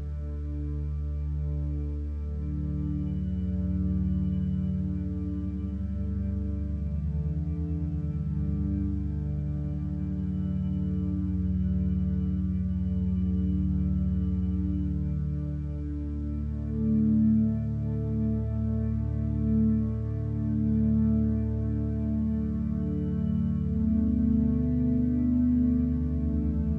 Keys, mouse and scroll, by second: 4.7 ctrl+z, 5.9 x, 7.5 x, 12.1 ctrl+space.